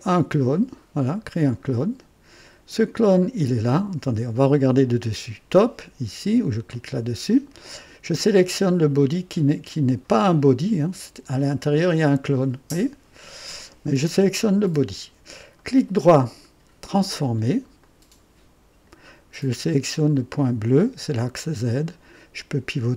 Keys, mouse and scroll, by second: 1.3 click, 3.0 click, 6.6 click, 8.4 click, 10.7 click, 11.6 scroll down 1, 13.5 click, 14.6 click, 15.5 right click, 16.8 click, 17.8-19.0 right drag, 20.1-22.9 drag.